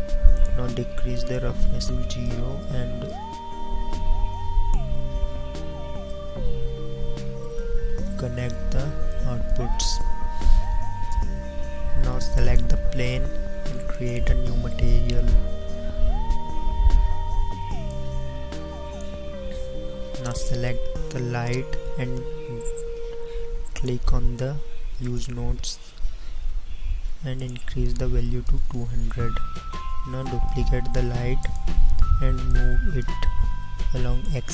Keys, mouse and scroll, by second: 12.4 right click, 20.6-26.2 right drag, 30.0 KP_0, 30.9 shift+d.